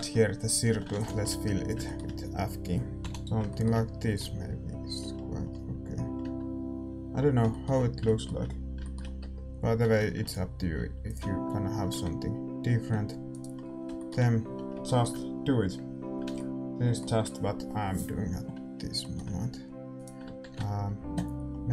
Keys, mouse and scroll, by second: 0.4-5.1 middle drag, 0.6 a, 1.1 ctrl+s, 1.3 Tab, 3.0 l, 4.1-6.1 drag, 5.7 a, 6.2 Tab, 8.8-11.8 middle drag, 10.1 ctrl+r, 11.8 ctrl+b, 13.5-21.5 middle drag, 14.4 a, 19.9-21.7 right drag, 20.4 ctrl+b.